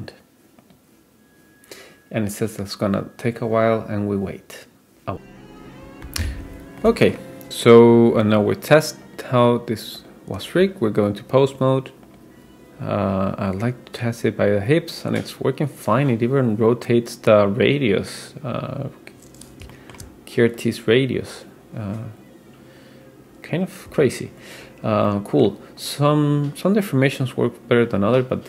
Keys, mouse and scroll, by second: 0.6-5.1 drag, 6.8-7.2 middle drag, 9.1-10.2 drag, 12.1 click, 13.1 click, 13.3-18.5 drag, 18.6-19.7 scroll up 3, 19.7-20.1 shift+middle drag, 20.6-24.3 drag, 24.7-25.5 scroll down 3, 25.1-25.5 middle drag, 25.8-28.4 drag.